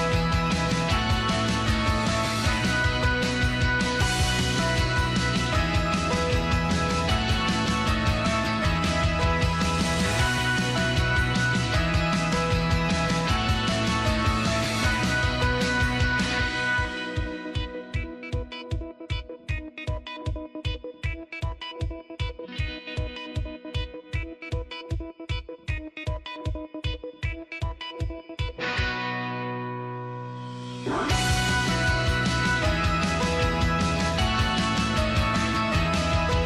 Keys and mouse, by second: 1.6 middle click, 2.8 middle click, 3.9 s, 6.8 shift+middle click, 9.4-11.0 drag, 11.5 click, 12.2-13.3 drag, 14.5 click, 14.7-15.9 drag, 16.3 shift+middle click, 18.6-20.1 drag, 20.5 click, 21.1 click, 22.4 middle click, 23.1 z, 23.7 middle click, 24.0 middle click, 25.6 click, 26.8-28.5 drag, 29.1 click, 29.9-31.7 drag, 32.1 click, 32.9 click, 34.2 shift+middle click, 34.5 middle click, 35.2 click, 35.5 middle click.